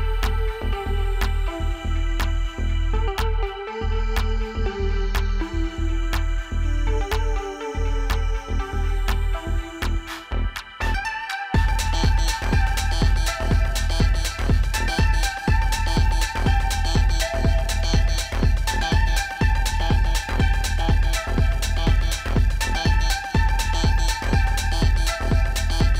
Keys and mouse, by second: 0.9-1.4 typing, 5.8 space, 5.9 click, 6.0 space, 13.0 space, 13.1 click, 13.2 space, 16.3 space, 16.4 click, 16.5 space, 18.7 space, 18.8 click, 18.9 space, 21.1 -, 22.1 click.